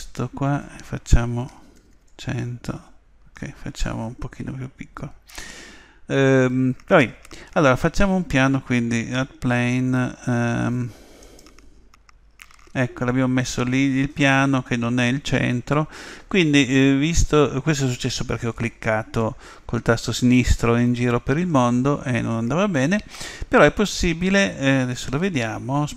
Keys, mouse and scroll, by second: 1.9 0, 11.9-13.9 middle drag.